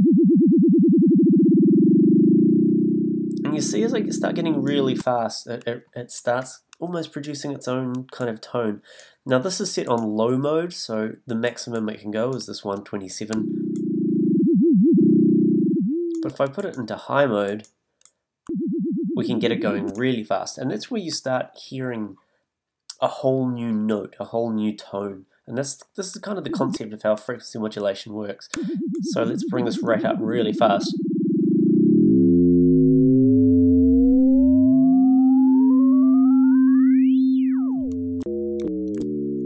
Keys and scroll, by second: 13.3 a, 18.4 a, 26.4 a, 28.5 a, 38.2 f.